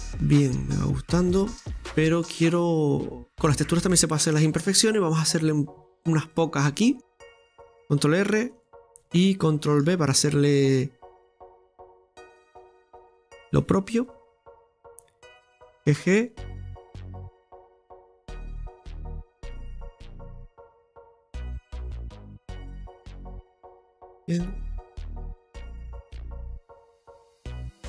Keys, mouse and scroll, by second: 4.3 scroll up 2, 5.4 Tab, 5.9-6.3 scroll up 2, 6.3-8.0 middle drag, 8.6-9.9 drag, 13.8 scroll up 1, 14.8 right click, 15.8 g, 17.8 right click, 18.5 g, 21.1 click, 21.8-24.6 middle drag, 24.6 right click, 24.9 g.